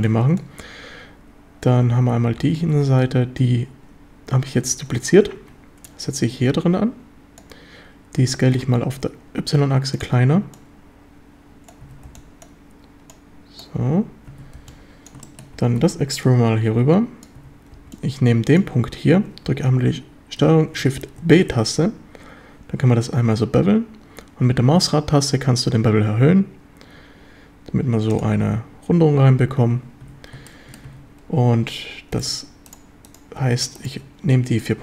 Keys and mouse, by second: 0.0 b, 2.4 shift+d, 2.7 Escape, 4.5 g, 5.4 Escape, 5.8-7.4 drag, 8.3 s, 8.6 y, 10.0 click, 10.6-11.7 drag, 11.8 a, 12.0 b, 13.1 click, 14.3 a, 14.6 b, 15.2 shift+drag, 15.6 e, 15.8 Escape, 16.2-17.2 drag, 17.4 a, 17.7 b, 21.2 ctrl+shift+b, 28.1 drag, 30.0 a, 30.5-30.8 shift+middle drag, 30.8 a.